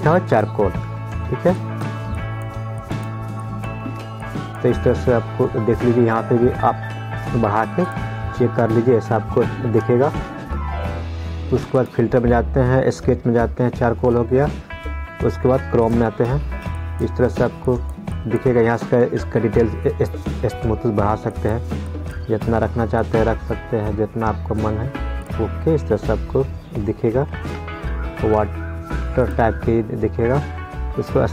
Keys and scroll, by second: 10.5 ctrl+z, 27.8 ctrl+z.